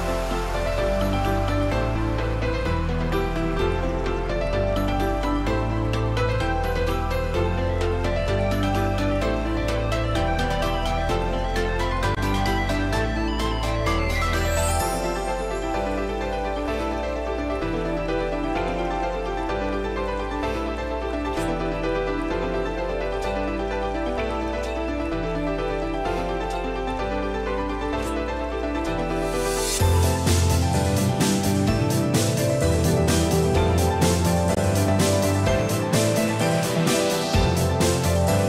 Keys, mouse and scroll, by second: 0.2 middle click, 1.0-1.4 scroll up 2, 1.2 middle click, 5.1 middle click, 6.1 shift+middle click, 6.6 middle click, 8.8 shift+d, 18.4 Tab, 19.7 click, 20.5 click, 20.6 click, 24.1 Tab, 25.5 scroll up 2, 26.2 middle click, 28.1 a, 35.3 alt+s.